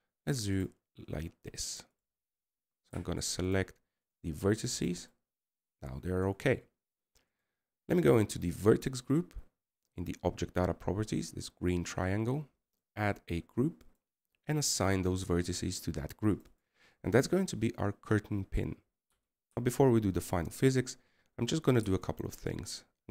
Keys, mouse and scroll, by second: 5.8 right click, 6.5 right click.